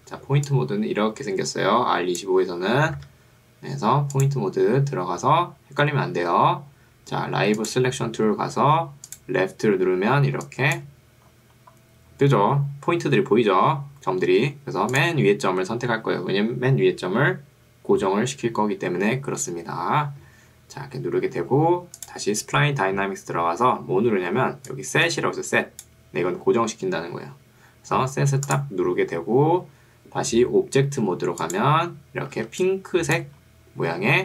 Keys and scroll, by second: 0.2 ctrl+2, 3.0 Escape, 24.4 ctrl+2, 26.4 Escape, 32.4 ctrl+2.